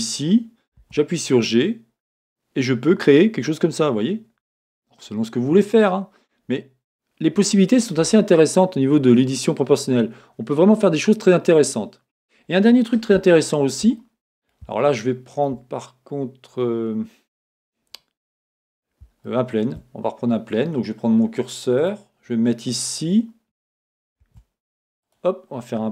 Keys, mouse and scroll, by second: 0.9 g, 7.8 click, 8.2-21.8 middle drag, 10.3 scroll, 10.8-12.1 scroll down 2, 12.1-13.2 scroll down 1, 21.8 click, 21.9 middle click, 22.9 click, 24.2 shift+a.